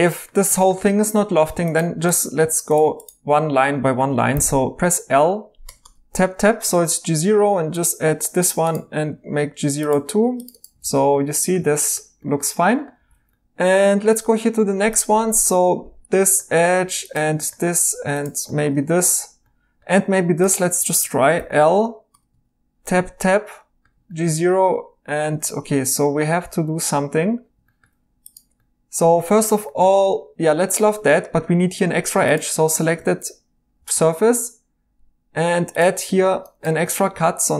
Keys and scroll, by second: 4.3 i, 5.6 Tab, 10.8 e, 13.0 e, 14.2 2, 21.3 i, 22.1 Tab, 22.3 Tab, 25.5 Escape, 32.0 Tab, 33.8 ctrl+r, 37.1 2.